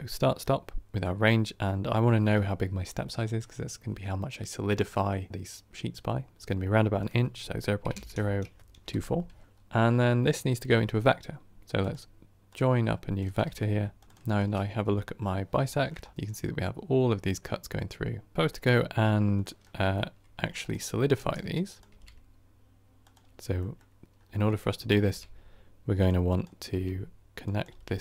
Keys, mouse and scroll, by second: 0.3-8.8 drag, 8.8 KP_0, 12.5-14.2 drag, 15.6-15.9 shift+middle drag, 15.9 scroll up 3, 16.1-18.4 middle drag, 18.4 click.